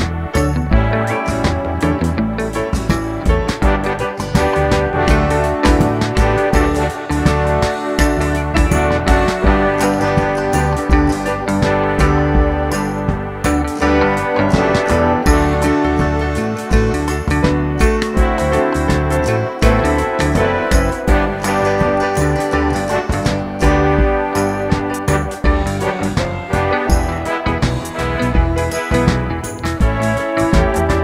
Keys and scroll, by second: 0.9 2, 1.1 Return, 10.1 Page_Up, 20.7 d.